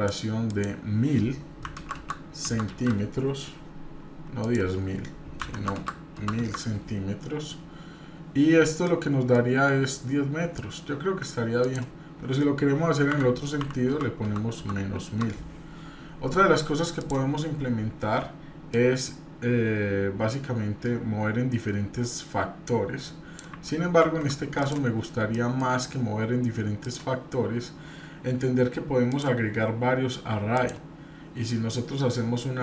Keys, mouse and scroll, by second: 0.5-3.6 drag, 1.9 KP_0, 4.4-7.1 drag, 5.7 KP_0, 8.3-8.7 scroll down 2, 8.8-9.3 middle drag, 10.5 middle drag, 11.6-15.8 drag, 14.2 KP_0, 16.9 click, 18.7-23.4 drag, 24.0 ctrl+z, 24.5 click, 25.3 shift+middle click, 26.0-26.6 scroll up 1, 26.8 click, 29.1-30.7 drag.